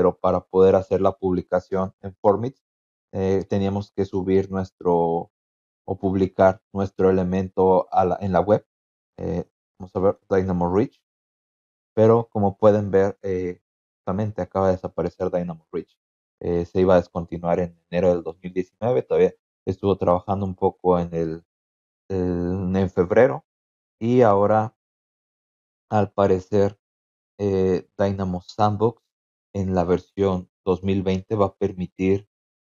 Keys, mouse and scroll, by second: 0.6 click, 1.0 click, 2.5-4.3 typing, 9.2-10.5 typing, 10.7 Return, 16.2 click, 21.8 click, 28.3 click.